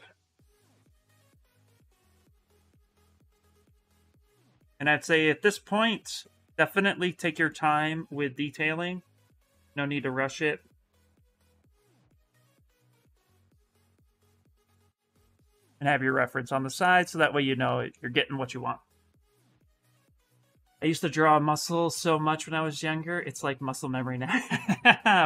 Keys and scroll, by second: 3.5 s, 6.2 space.